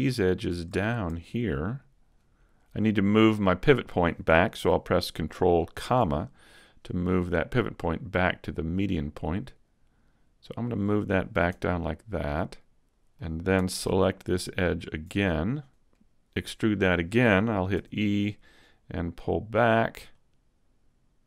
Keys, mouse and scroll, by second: 0.8 shift+right click, 5.7 ctrl+,, 7.1 middle click, 8.7 click, 11.5 Tab, 11.8 middle click, 14.8 alt+right click, 15.1 middle click, 15.9 a, 17.7 e, 18.2 click, 20.1 click.